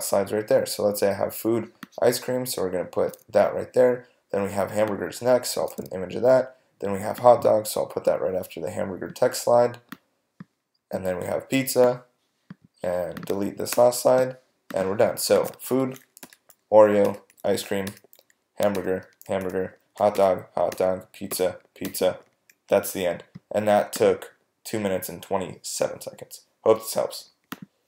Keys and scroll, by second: 13.7 BackSpace, 16.2 Right, 17.9 Right, 21.3 Right, 21.9 Right.